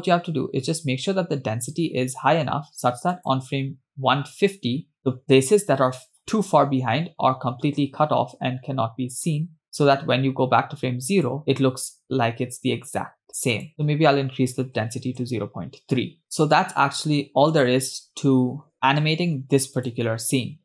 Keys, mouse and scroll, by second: 0.1 click, 3.4 click, 11.4 click, 13.7-15.6 drag, 16.5 space, 18.1 click, 20.2 click.